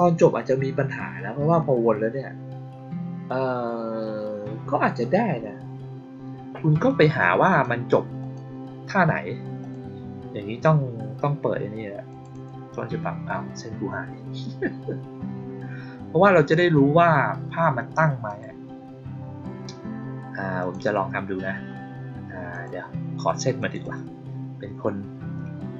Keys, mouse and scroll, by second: 6.8 click, 7.4 click, 8.1 click, 9.5 click, 12.0 click, 12.2 click, 18.2 click, 20.5 click, 20.7 click, 22.4 click, 23.5 click, 23.7 click.